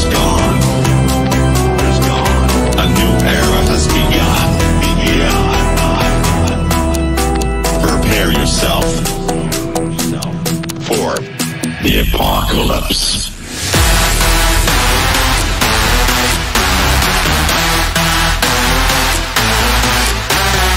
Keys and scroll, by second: 0.7 c, 6.6 g, 16.4 space, 18.7 g.